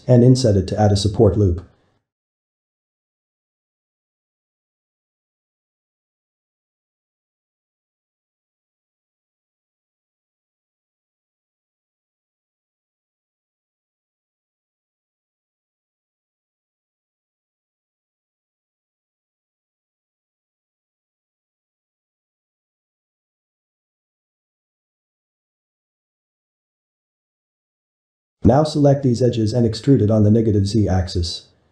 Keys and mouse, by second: 0.1 ctrl+z, 0.6 ctrl+z, 1.1-1.6 shift+middle drag, 1.6 ctrl+shift+z, 2.1-2.6 shift+middle drag, 2.6-4.1 right drag, 4.1-5.1 ctrl+middle drag, 5.1 s, 8.1-9.3 right drag, 9.3-11.1 ctrl+middle drag, 11.1 e, 13.4-16.5 middle drag, 19.3-27.0 middle drag, 27.0 click, 27.6 middle click, 28.2 ctrl+click, 28.7 middle click, 29.4 e, 30.7 middle click, 31.1 g.